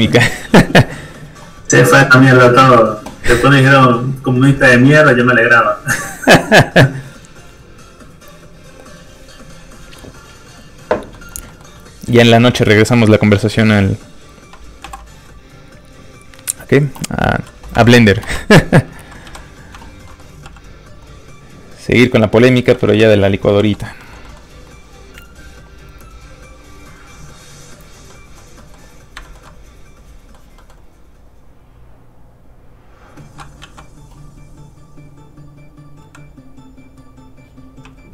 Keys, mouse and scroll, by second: 8.9 click, 11.1 middle click, 11.3 scroll up 1, 11.4 middle click, 12.0 click, 14.8 alt+m, 16.4 click, 17.7 1, 18.2 Return, 19.2 i, 20.0 middle click, 20.4 shift+f, 20.5 click, 22.6 middle click, 22.9 ctrl+z, 23.5 z, 23.6 f, 23.7 click, 24.0 shift+middle click, 24.2 middle click, 25.5 click, 28.1 middle click, 29.2 shift+middle click, 29.4 middle click, 29.5 middle click, 30.1 scroll up 1, 30.2 middle click, 32.4 click, 33.6 ctrl+z, 36.0 right click, 36.0 click, 37.0 click, 37.8 q.